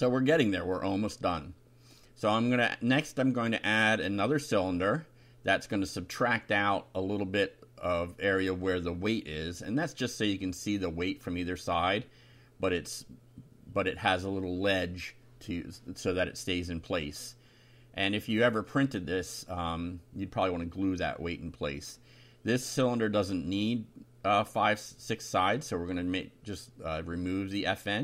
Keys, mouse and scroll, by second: 0.8-3.6 drag, 4.2 click, 8.2 click, 8.6 middle click, 8.8 click, 9.1-10.3 ctrl+middle drag, 10.3 click, 11.1 click, 12.2 ctrl+c, 12.9 click, 13.8 Return, 14.2 ctrl+v, 15.1 Home, 16.0 Up, 16.3 Delete, 17.3 Down, 17.7 BackSpace, 18.2 Up, 21.2-22.5 drag, 23.3 Delete, 26.1 click, 27.5-28.0 typing.